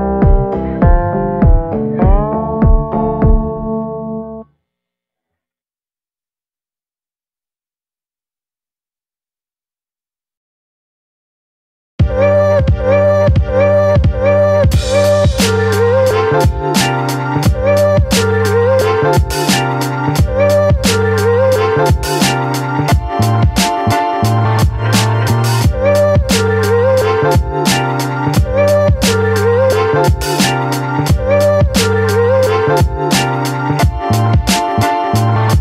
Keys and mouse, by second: 0.2 b, 1.3 middle click, 2.0 b, 3.5 middle click, 4.2 b, 4.9 b, 7.3 right click, 7.8 middle click, 8.4-9.5 right drag, 10.5 click, 12.1-12.5 ], 12.6-14.9 drag, 15.3-19.1 drag, 20.1-21.2 middle drag, 21.2-22.9 drag, 23.7 middle click, 24.3 middle click, 25.0 click, 26.2 click, 27.2 ctrl+z, 28.7 middle click, 29.5-30.6 middle drag, 30.9 middle click, 31.5 shift+middle click, 31.9 middle click.